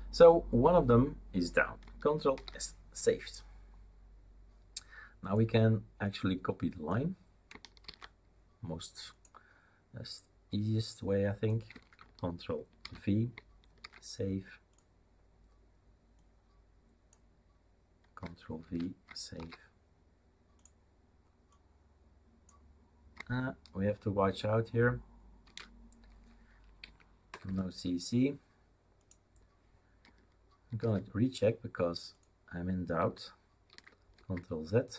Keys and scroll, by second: 2.3 ctrl+s, 7.8 ctrl+c, 12.8 ctrl+v, 13.8 ctrl+s, 18.6 ctrl+v, 19.3 ctrl+s, 25.4 ctrl+v, 26.8 Left, 27.3 BackSpace, 27.4 BackSpace, 30.8 ctrl+s, 33.7 ctrl+z, 34.1 ctrl+z.